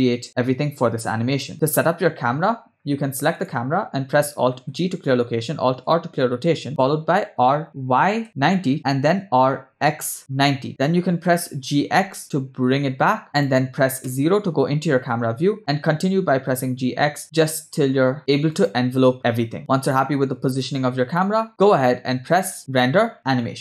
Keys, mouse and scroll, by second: 2.3 space, 3.4 click, 4.8 alt+g, 6.0 alt+r, 7.4 r, 9.2 r, 10.7 KP_0, 11.2 g, 14.1 KP_0, 15.4-15.8 scroll down 2, 15.9 g, 19.6 space, 22.1 space, 22.7-23.6 drag.